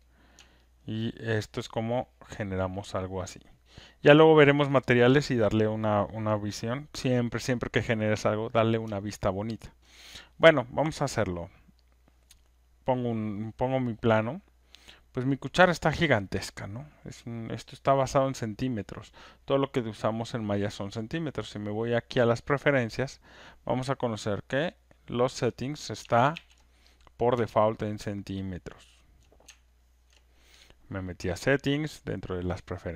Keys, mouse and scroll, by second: 0.0 alt+click, 0.0 alt+right click, 0.1 click, 0.1 3, 0.9 right click, 1.1 alt+middle click, 3.5 alt+click, 4.7 alt+right click, 9.8 alt+right click, 11.9 click, 15.0 click, 22.4 click, 24.7 click, 26.3 ctrl+F1, 27.0 click, 29.2 ctrl+click, 30.1 ctrl+shift+click.